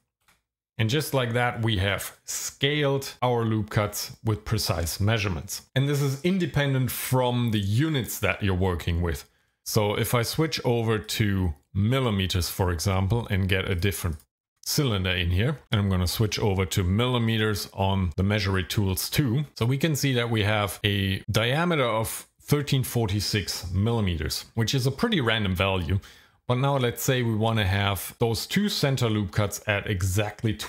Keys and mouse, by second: 0.3 KP_Enter, 9.4 Tab, 11.1-12.4 drag, 13.7 click, 14.1 click, 16.2-17.4 drag, 19.5 click.